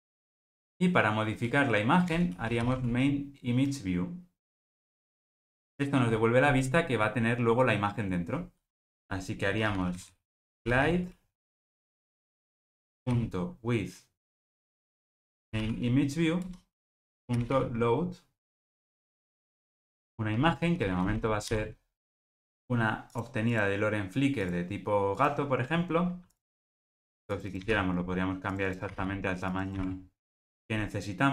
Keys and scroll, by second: 5.1 Return, 12.1 alt+Return, 15.7 Return, 21.5 super+v, 26.7 super+c.